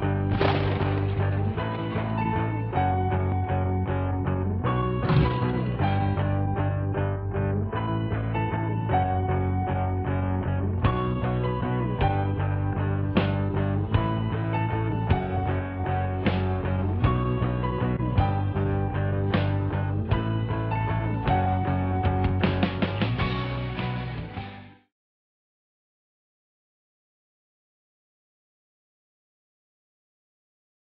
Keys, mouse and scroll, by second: 11.3 click.